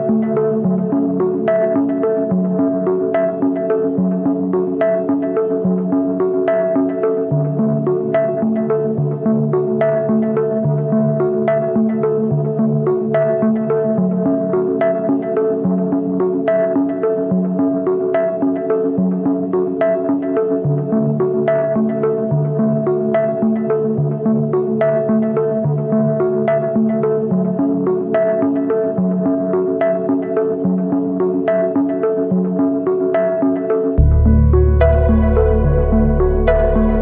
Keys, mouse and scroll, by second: 0.1-2.8 typing, 4.3-5.3 typing, 6.8 typing, 12.1 typing, 12.3 double click, 12.4 double click, 19.4 right click, 29.9 ctrl+t, 33.8 alt+shift+click.